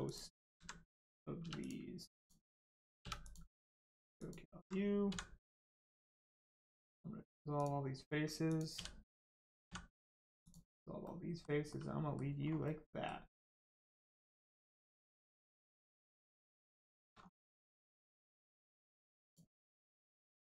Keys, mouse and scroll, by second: 0.0 click, 1.4 3, 1.6 click, 3.0 3, 3.2 click, 4.2 alt+click, 5.0 x, 7.5 click, 8.7 l, 10.4 click, 11.0 middle click, 12.4 scroll up 1, 12.6 middle click, 13.9-14.2 scroll up 1, 14.2 middle click, 16.8 shift+middle click, 17.1 scroll up 1, 18.0 click, 19.6 middle click.